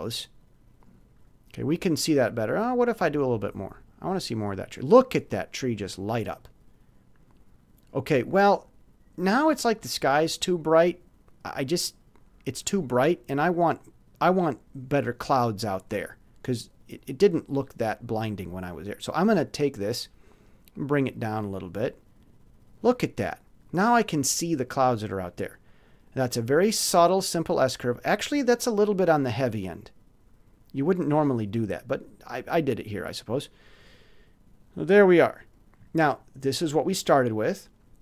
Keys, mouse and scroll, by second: 3.3-4.7 drag, 20.4-22.8 drag, 33.5 click, 36.7 click.